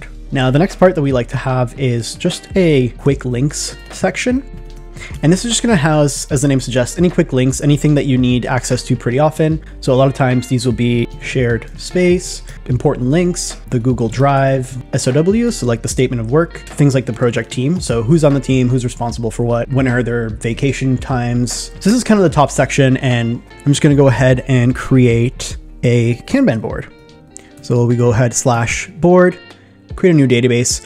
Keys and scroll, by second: 3.0 shift+3, 11.2 shift+s, 13.0-16.6 typing.